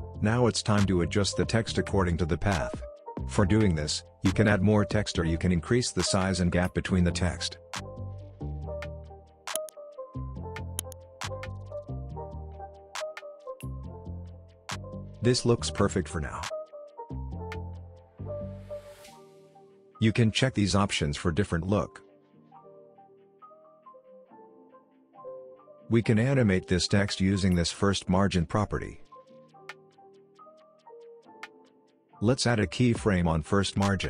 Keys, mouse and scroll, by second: 3.2 click, 4.5 space, 7.8 click, 10.4-15.1 drag, 21.2 click, 24.3 click, 27.4-31.2 drag, 31.6 ctrl+z, 32.9-34.0 drag.